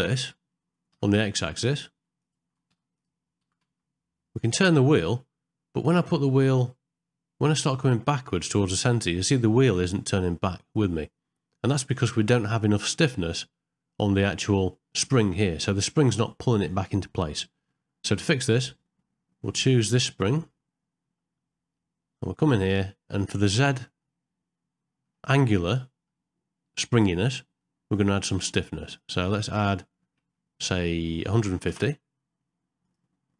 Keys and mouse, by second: 2.2 click, 3.0 click, 20.1 click, 21.8-23.1 middle drag, 24.0-25.1 middle drag, 25.8 middle click, 27.6 middle click, 28.9 click, 29.6-31.7 drag, 32.8-33.3 drag.